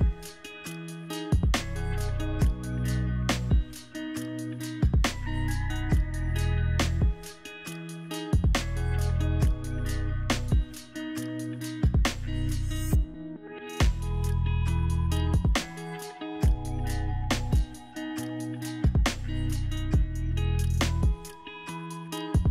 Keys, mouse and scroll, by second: 1.6-5.3 alt+drag, 1.6 alt+right click.